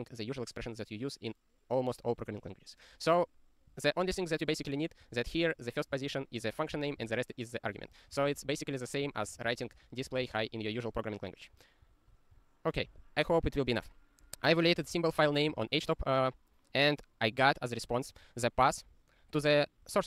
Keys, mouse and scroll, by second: 3.7 click, 5.2 ctrl+space, 5.5 alt+f, 6.1 ctrl+g, 7.1 ctrl+e, 7.8-10.7 typing, 11.8 ctrl+/, 12.1 ctrl+/, 12.3 ctrl+/, 13.0 ctrl+s, 14.6 click, 14.8 ctrl+space, 14.9 ctrl+a, 15.3 ctrl+g, 15.5 ctrl+e.